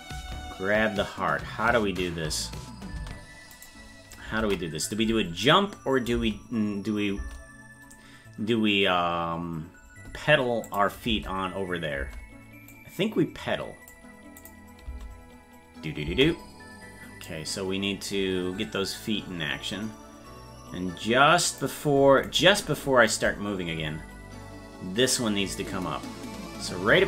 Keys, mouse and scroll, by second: 0.1 space, 3.5 right click, 4.4 ctrl+Tab, 5.5 click, 10.7 click, 11.1 space, 12.7-13.9 drag, 14.4 click, 14.8 space, 17.3-21.6 drag, 22.4 right click, 23.1-27.0 drag.